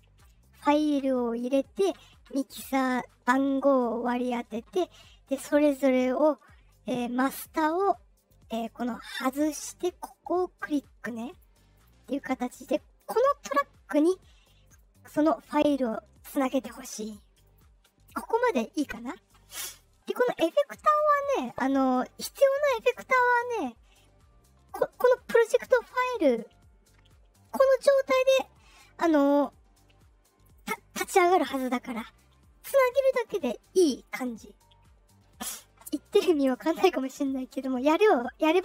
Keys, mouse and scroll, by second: 5.3 click, 8.1 click, 9.0 click, 10.5 click, 11.2 click, 11.7 click, 12.9 click, 14.6 click, 15.1 click, 17.4 click, 37.2-38.6 drag.